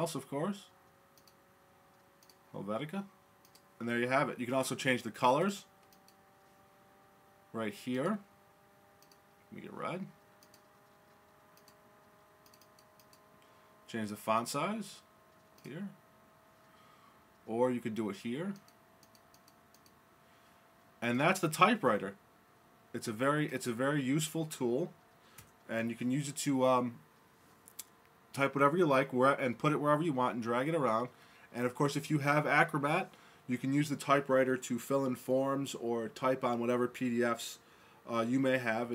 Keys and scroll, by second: 25.4 BackSpace.